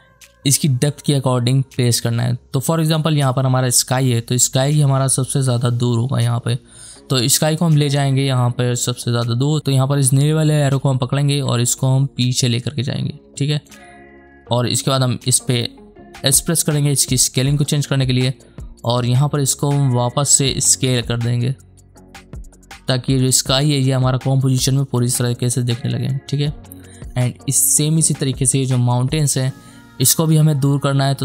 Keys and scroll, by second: 7.6 space, 16.2 s.